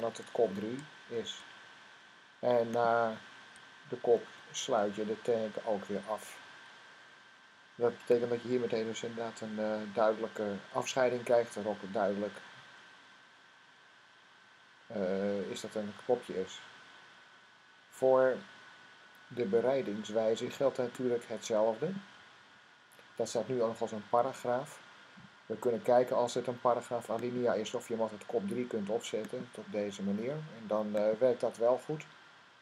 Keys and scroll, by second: 1.0 typing, 4.0 typing, 5.2 typing.